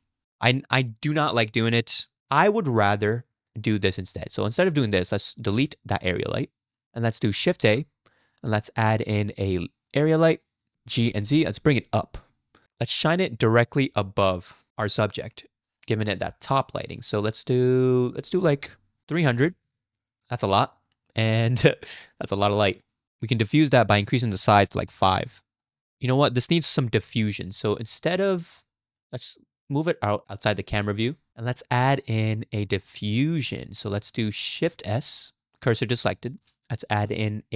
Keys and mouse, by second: 5.5 x, 7.5 shift+a, 11.0 g, 18.2-19.7 drag, 19.4 0, 21.9-22.3 middle drag, 22.9 middle click, 23.9-25.1 drag, 26.5 KP_0, 29.0 g, 31.3 middle click, 31.5 click, 32.8-33.5 shift+drag, 34.8 shift+s, 36.8 shift+a.